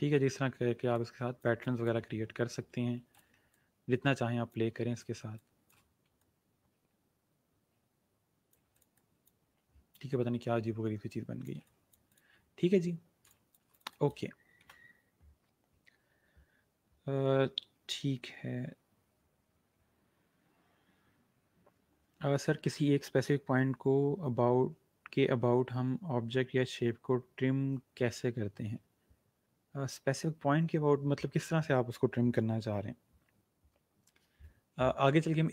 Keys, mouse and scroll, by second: 0.0 ctrl+g, 1.0 shift+click, 2.1-2.9 alt+scroll up 4, 2.9 ctrl+shift+g, 3.1 click, 5.1 space, 5.3 click, 5.6 space, 6.1 alt+click, 10.1 g, 10.6 shift+g, 11.2 alt+shift+click, 12.6-13.2 alt+scroll up 2, 13.4 click.